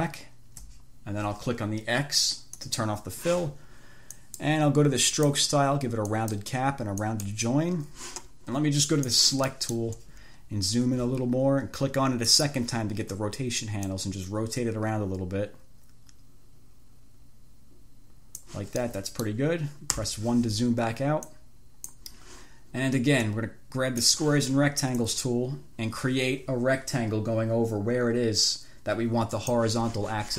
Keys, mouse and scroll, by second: 0.1 shift+click, 2.8 click, 4.4 click, 5.3 click, 6.3 click, 7.3 click, 9.1 click, 9.7 middle click, 10.6-11.1 ctrl+scroll up 2, 12.5 click, 14.1 click, 19.1 middle click, 20.3 1, 21.6-22.4 drag, 23.6 click, 25.2-30.0 drag.